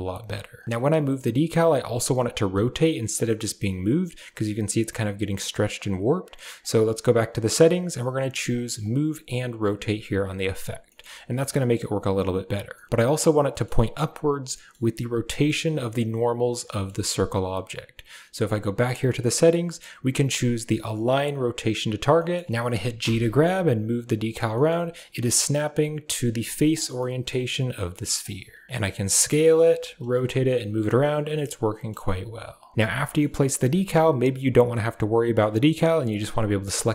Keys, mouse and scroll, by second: 6.6-10.3 drag, 10.8 shift+middle click, 12.6 shift+middle click, 13.4 middle click, 14.3 middle click, 15.1 shift+middle drag, 16.5 shift+middle drag, 18.2-21.7 drag, 22.4 g, 22.8 g, 24.4 shift+middle click, 24.6 middle drag, 26.7-27.1 middle drag, 28.6 middle click, 28.7 g, 28.7 s, 31.0-31.7 middle drag, 31.7 g, 32.9 middle click, 36.0 right click.